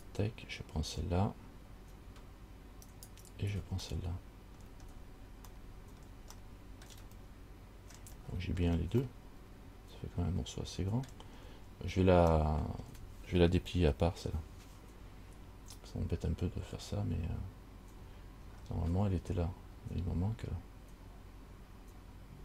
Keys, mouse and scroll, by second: 0.1 alt+right click, 3.1 alt+shift+right click, 4.3 middle click, 4.8-5.7 scroll down 4, 5.8 middle click, 6.7 shift+middle click, 7.1 shift+scroll down 1, 7.5 middle click, 8.4-9.2 scroll down 9, 9.4 middle click, 11.6-12.1 scroll up 4, 12.6 shift+middle click, 16.7-18.2 scroll up 2, 18.7-20.0 scroll down 4.